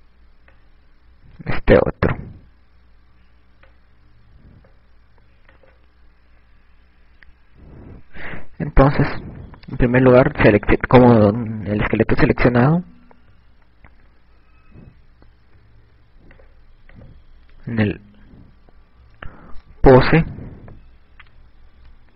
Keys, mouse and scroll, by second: 13.4 KP_Add, 17.8 click, 21.2 i.